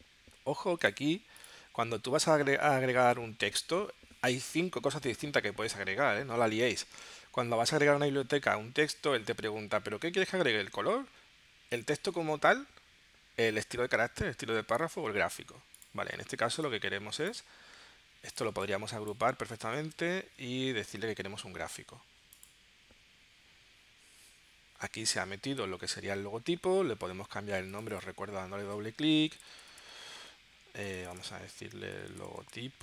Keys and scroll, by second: 19.7 super+g, 29.2-32.8 typing.